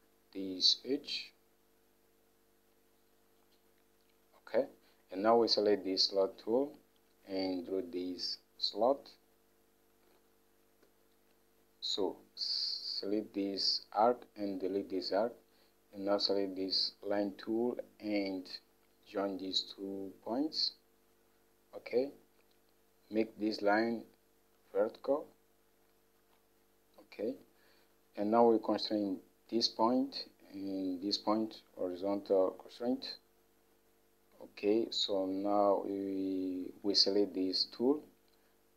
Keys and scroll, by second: 11.0 Escape, 15.1 Delete, 27.9 Escape.